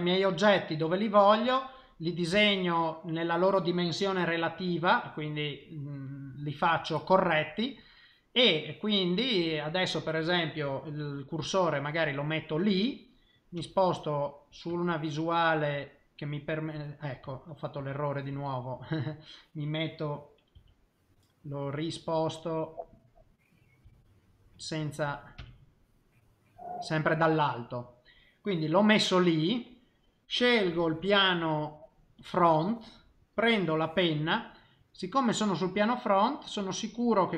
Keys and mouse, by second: 0.2 middle click, 2.3 KP_1, 7.0 middle click, 9.1 middle click, 10.6 click, 12.1 click, 13.5 KP_1, 15.0 shift+middle click, 15.8 middle click, 17.8 ctrl+z, 18.3 ctrl+z, 18.8 middle click, 20.1 middle click, 20.5 KP_1, 23.0 click, 23.8 KP_7, 25.0 click, 25.4 KP_1, 26.0 middle click, 29.3 middle click, 31.0 click, 33.3 click, 35.8 click, 36.6 click.